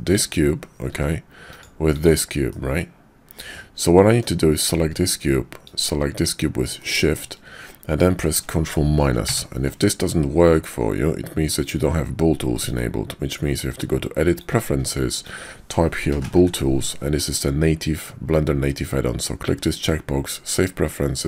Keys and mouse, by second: 0.9 g, 2.5-4.2 middle drag, 6.8 shift+middle click, 11.5-12.7 drag.